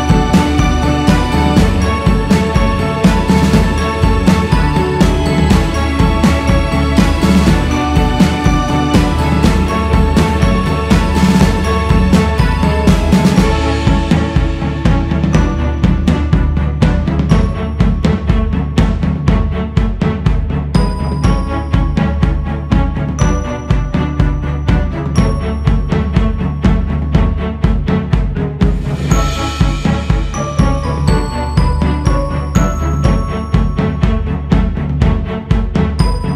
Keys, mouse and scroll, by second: 2.1 f, 3.6 click, 4.9-6.2 scroll down 1, 6.9-8.9 scroll up 1, 11.0-11.6 scroll up 14, 12.4-15.8 drag, 19.8 f, 22.1-28.2 drag, 28.2-29.4 scroll down 7, 29.4-32.6 drag, 32.6 scroll down 5.